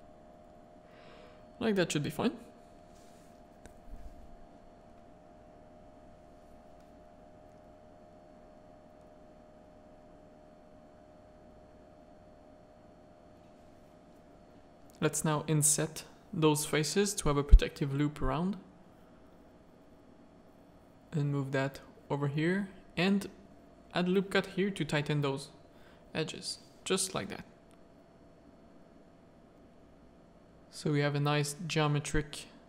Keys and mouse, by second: 0.5 click, 1.3 Tab, 1.8 alt+a, 2.1 middle drag, 2.4 z, 3.5 middle click, 4.2-4.9 middle drag, 5.8 z, 5.9 middle click, 6.2 Tab, 6.8 3, 7.7 ctrl+click, 10.0 shift+click, 10.5 middle click, 11.7 middle click, 12.3 middle click, 13.9 middle click, 14.6 i, 17.8 middle click, 18.7 middle click, 20.0-21.5 drag, 21.7 1, 21.8 middle click, 22.5 ctrl+r, 24.6 ctrl+r, 26.1 3, 26.4 click, 26.8 Tab, 27.3 middle click, 28.2 z.